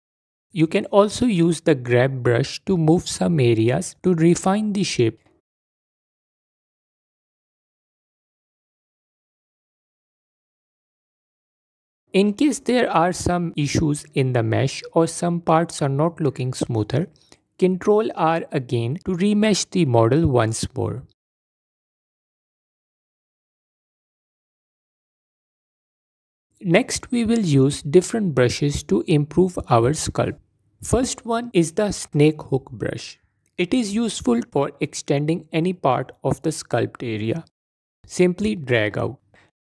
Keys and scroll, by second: 2.5 f, 4.1 f, 13.2 F4, 14.6 F4, 22.1 ctrl+r, 28.2 f, 33.3 f, 34.0 f.